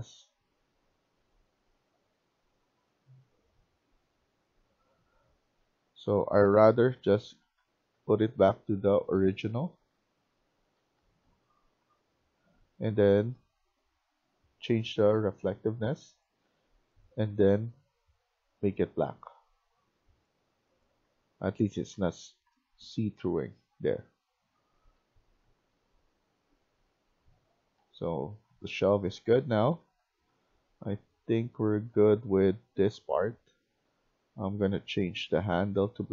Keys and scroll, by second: 5.3 Escape, 5.5 Escape, 6.5 ctrl+z, 21.2-23.6 typing, 25.3-30.2 typing, 31.3-34.0 typing.